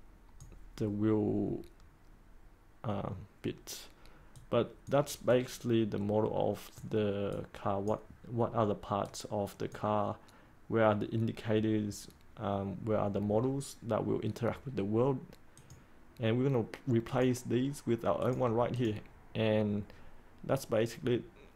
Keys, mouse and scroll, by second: 13.4-15.5 scroll down 1, 15.5-21.5 drag.